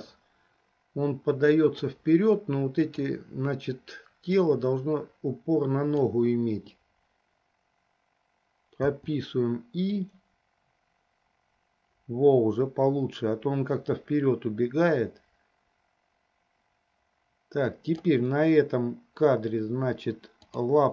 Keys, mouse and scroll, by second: 3.1 click, 4.7-6.5 drag, 10.3-18.4 drag.